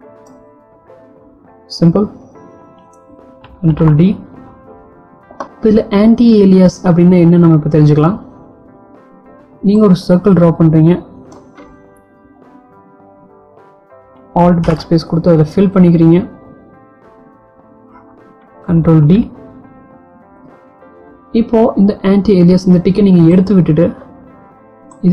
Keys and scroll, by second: 3.8 ctrl+d, 14.4 alt+BackSpace, 18.6 ctrl+d.